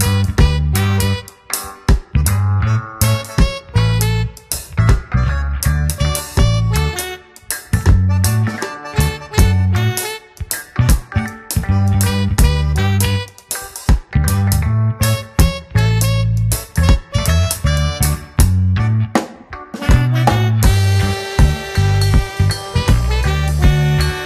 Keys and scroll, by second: 1.7 space, 11.2 ctrl+alt+z, 12.2 [, 14.7 space, 18.3 ctrl+alt+d, 18.6 Return, 19.3 shift+F2, 20.2 ctrl+KP_Subtract, 21.8 Return, 22.6 ctrl+m, 24.1 Return.